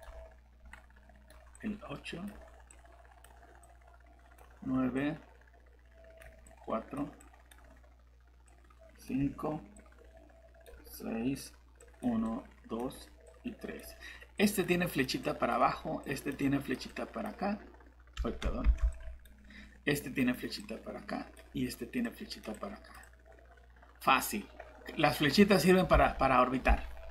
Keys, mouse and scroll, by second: 1.5 click, 18.6 ctrl+z, 25.9 alt+Tab.